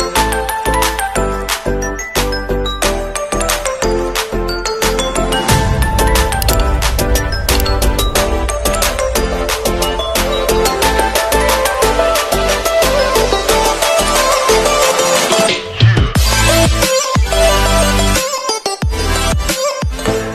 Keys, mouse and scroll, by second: 0.0 click, 4.6 g, 5.0 right click, 5.7 click, 7.8 v, 11.5 click.